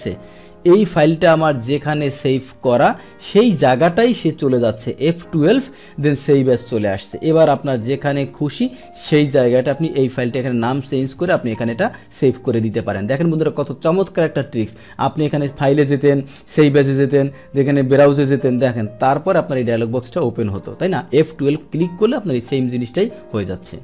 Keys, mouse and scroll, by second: 1.7 click, 5.2 F12, 6.2 F12, 7.9 click, 10.0 click, 12.7 click, 15.1 click, 16.2 click, 17.6 click, 20.6 click, 22.3 Escape, 23.0 click.